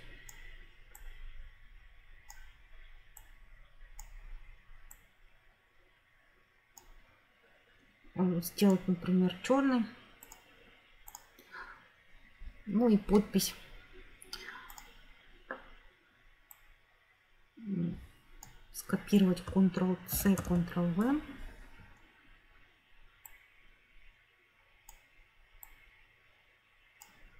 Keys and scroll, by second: 20.0 ctrl+c, 20.4 ctrl+v.